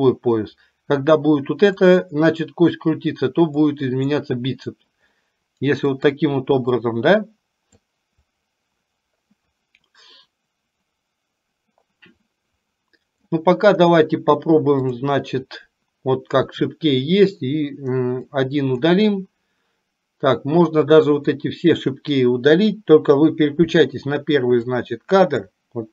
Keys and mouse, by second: 1.0 click, 3.8 click, 5.9 click, 6.8-7.9 drag, 8.4-13.4 drag, 18.4-18.9 drag, 20.9-21.4 drag, 24.8 click.